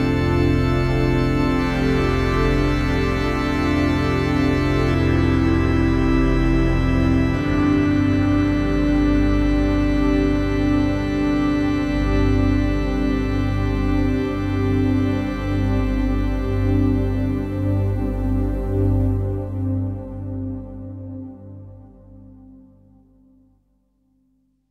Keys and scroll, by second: 2.6 F3, 2.8 Escape, 7.7 d, 8.8 Delete, 11.7 shift+Page_Up, 21.7 w, 23.0 shift+F2, 23.3 Escape.